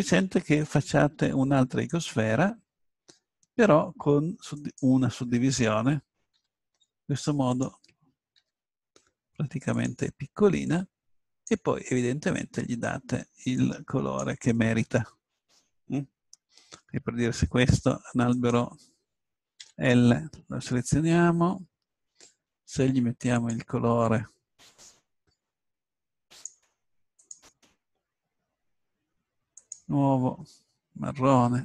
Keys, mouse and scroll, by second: 0.5 shift+a, 4.6-6.9 drag, 6.9 g, 8.3-9.5 drag, 8.4 s, 9.9-10.9 drag, 12.1 middle click, 13.6 middle click, 14.6-15.7 middle drag, 18.3-20.2 right drag, 19.6 l, 22.8 right click, 23.3 click, 25.6-27.1 drag, 27.2-31.6 drag.